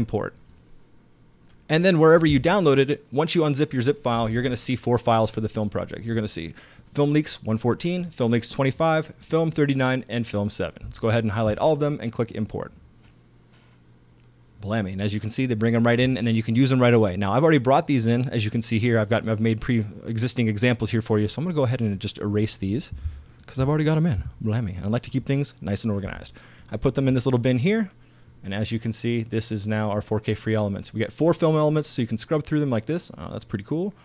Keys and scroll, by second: 24.2 shift+BackSpace, 24.7 BackSpace.